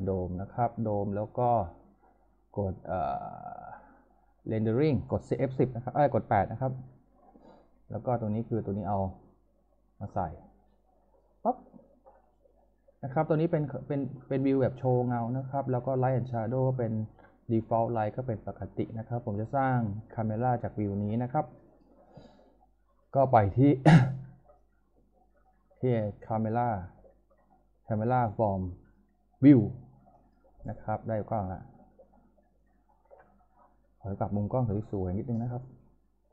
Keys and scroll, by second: 7.1 8.